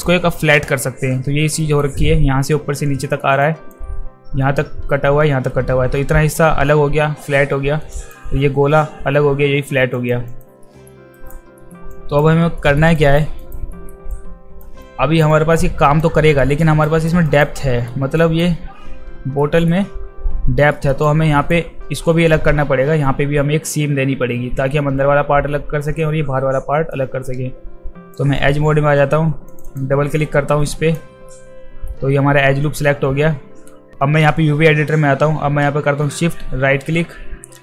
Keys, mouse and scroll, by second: 1.6 alt+middle click, 3.0 alt+middle click, 3.4 alt+click, 8.0 alt+click, 9.9 alt+click, 10.3 alt+click, 10.6 alt+middle click, 11.1 alt+right click, 11.6 alt+middle click, 11.9 alt+click, 12.6 alt+middle click, 13.0 alt+right click, 13.4 alt+right click, 13.7 alt+middle click, 14.1 alt+click, 14.8 alt+click, 15.3 alt+click, 16.4 alt+middle click, 16.9 alt+right click, 17.2 alt+right click, 17.6 alt+middle click, 18.2 alt+click, 19.4 alt+middle click, 20.7 alt+middle click, 21.0-21.5 alt+right drag, 26.9-28.2 right drag, 29.5 click, 29.7 click, 30.7 alt+click, 31.3 alt+middle click, 36.2-37.6 shift+right drag.